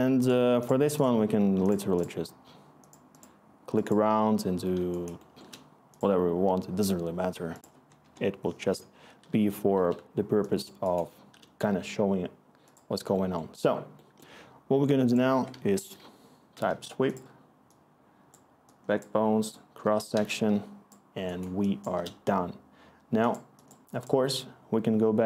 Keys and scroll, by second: 8.0-9.7 Return, 11.2-11.9 typing, 15.3-16.3 typing, 16.7 Return, 20.7-22.4 scroll.